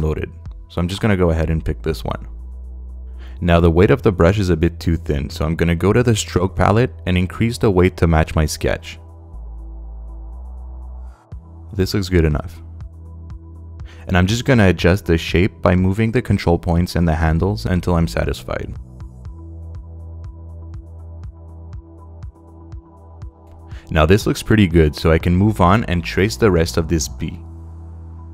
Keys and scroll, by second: 8.4 i, 9.5 ., 10.6 5, 10.9 Home, 14.2 super+space.